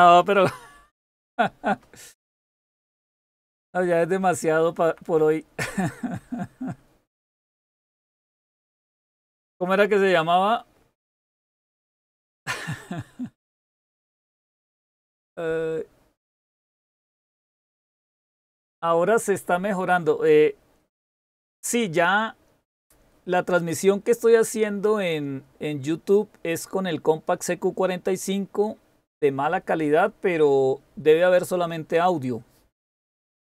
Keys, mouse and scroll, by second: 0.6 Up, 1.1 Up, 1.5 Up, 1.9 Up, 3.4 Down, 3.7 Down, 3.9 Down, 4.0 Down, 4.2 Down, 4.7 Down, 4.9 Down, 5.1 Down.